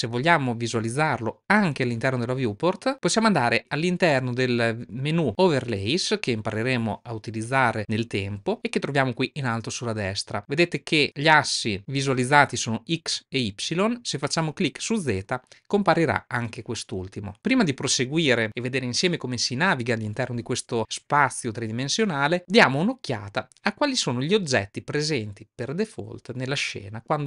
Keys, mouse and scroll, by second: 9.8-15.7 drag.